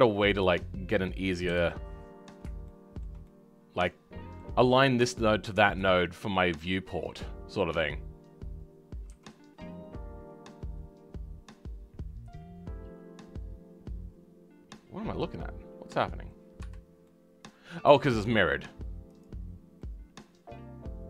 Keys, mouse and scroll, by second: 1.4 KP_3, 1.8 scroll up 4, 2.6-9.1 shift+middle drag, 9.1 r, 17.0-19.0 middle drag, 19.0 click, 19.9-21.0 middle drag.